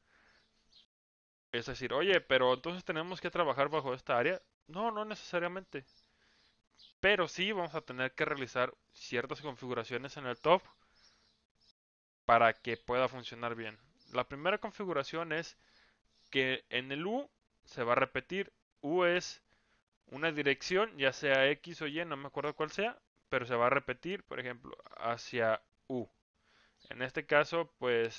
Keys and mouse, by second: 14.5-24.7 drag, 26.7-28.1 middle drag.